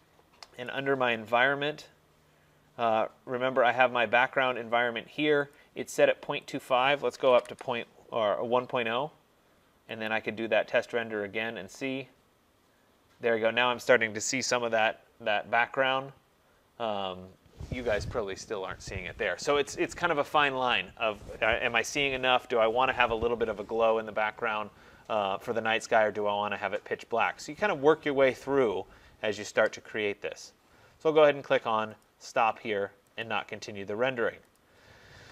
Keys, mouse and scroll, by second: 0.7 click, 1.9 middle click, 5.6 click, 6.7 click, 7.2 typing, 10.2 click, 32.1 click, 33.3 click, 34.6 click.